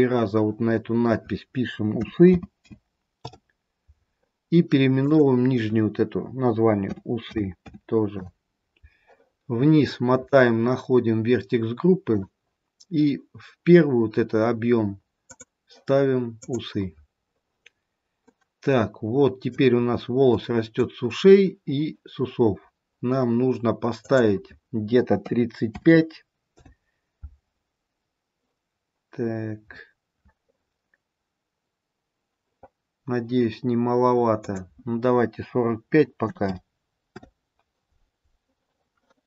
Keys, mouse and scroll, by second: 4.9 click, 9.3-10.6 scroll down 7, 12.0 click, 12.0-12.8 scroll down 2, 15.2 click, 17.9-18.7 scroll down 3, 19.0 middle click, 20.5 middle click, 21.0-21.4 scroll up 1, 28.6-29.8 scroll down 2, 29.1-29.8 scroll up 1, 31.6-32.4 scroll up 4, 32.6-33.1 scroll up 1, 34.3 click.